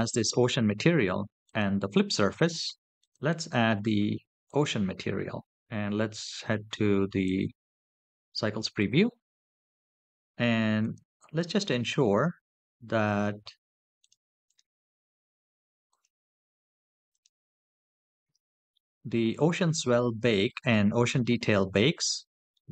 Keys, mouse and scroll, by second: 1.2 click, 2.8-4.4 drag, 7.4 click, 10.6 click, 13.8 click.